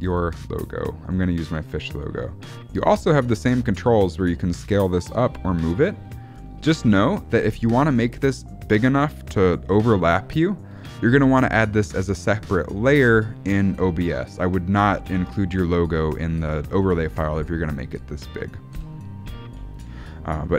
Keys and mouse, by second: 5.0-8.6 drag, 19.0 ctrl+z.